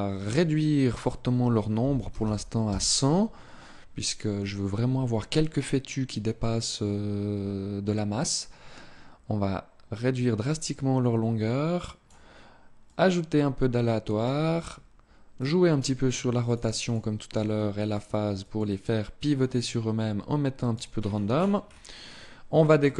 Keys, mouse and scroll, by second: 0.0 click, 7.1 scroll down 2, 8.0 click, 12.6 click, 14.2 scroll down 3, 15.1 click, 16.2 click, 16.4 click, 17.3 click, 18.0 click, 18.4 click, 20.6-21.5 scroll down 10, 22.6 click.